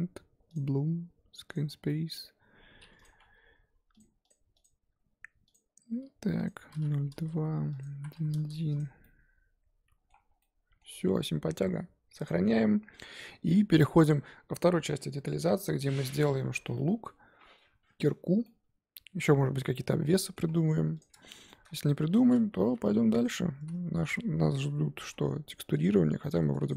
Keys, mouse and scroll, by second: 0.5 click, 1.5 click, 1.9-5.6 middle drag, 5.6-8.3 drag, 8.3 KP_1, 8.8 scroll down 3, 9.0-10.3 middle drag, 10.3 scroll down 1, 10.4 middle click, 10.9 scroll up 2, 18.5-20.5 middle drag, 20.5-21.0 scroll up 4, 21.0 click, 21.5 shift+middle click, 21.7 scroll up 1, 21.8 Tab, 22.2 z, 22.6 1, 23.2 click, 23.6 z, 23.9 s, 25.9 middle click, 26.4 Tab, 26.7 click.